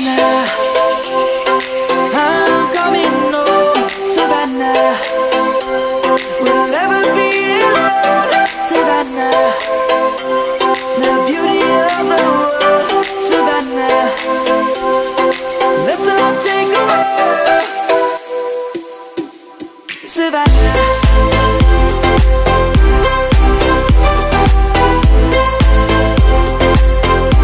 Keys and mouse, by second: 0.0 middle click, 3.7 Delete, 5.0 shift+a, 6.7 click, 9.6 1, 13.5 Return, 16.6 click, 20.0 shift+middle click, 21.4 click, 22.9 middle click, 24.8 click, 27.3 click.